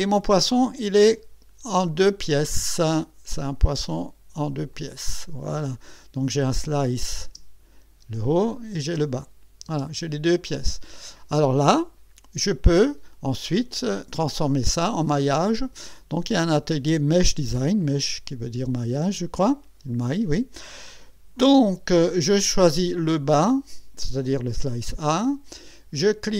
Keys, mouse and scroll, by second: 0.2-1.2 drag, 1.7-2.3 scroll down 1, 4.7 click, 5.2-5.8 scroll down 2, 6.8 click, 7.2 space, 8.0 space, 8.5 click, 8.8 space, 9.7 space, 10.3 click, 12.7 click, 15.6 click, 17.8 click, 23.0 click, 23.4 click.